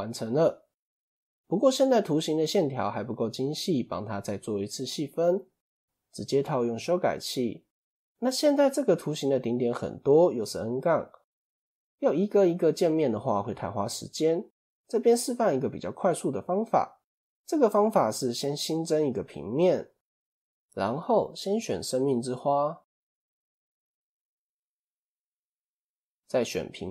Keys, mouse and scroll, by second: 0.7-1.5 scroll up 2, 1.5-3.0 shift+middle drag, 3.0-4.3 scroll down 2, 4.3 ctrl+2, 6.5 click, 7.1 click, 7.5-8.0 scroll up 2, 8.9 click, 9.3 Tab, 9.8-12.3 scroll up 2, 12.3 scroll down 1, 13.2 Tab, 13.9-14.6 scroll down 2, 15.5 click, 16.6 shift+a, 18.7 s, 20.3 click, 20.8-23.3 middle drag, 23.3 click, 24.2-25.4 middle drag, 25.4 shift+click, 26.5 KP_7.